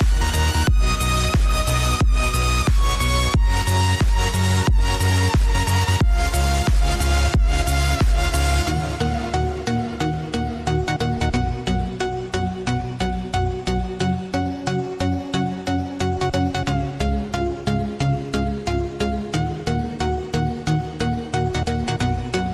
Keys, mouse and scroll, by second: 0.0 click, 0.4 Tab, 1.4-2.3 scroll down 2, 2.3 Tab, 2.8 click, 4.0 click, 4.8 alt+click, 6.1 click, 8.5 click, 10.1 click, 11.9 Tab, 12.3-13.5 scroll down 1, 13.5 click, 13.7-14.5 scroll down 1, 14.5 click, 16.2 click, 17.3 click, 18.0 scroll up 1, 19.4 click, 20.7 click, 21.9-22.5 drag.